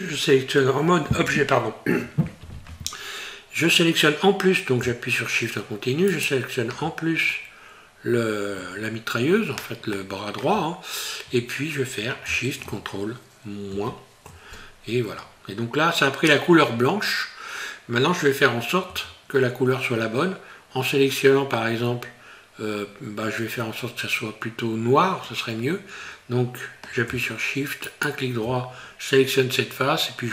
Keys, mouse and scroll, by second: 6.1 shift+right click, 7.2 scroll down 4, 8.6 scroll up 4, 9.9 shift+middle click, 10.7 scroll up 1, 13.8 ctrl+shift+KP_Subtract, 15.7 scroll down 1, 20.4 scroll up 1, 21.2 scroll down 1, 23.0-23.6 scroll up 3, 24.2-25.1 scroll up 1, 27.9 shift+right click.